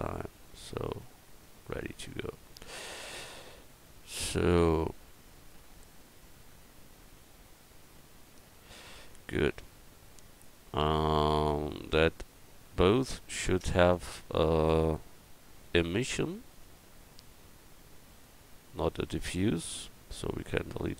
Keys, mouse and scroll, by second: 1.0 Tab, 8.7 a, 11.8 right click, 18.4 click, 20.1 x.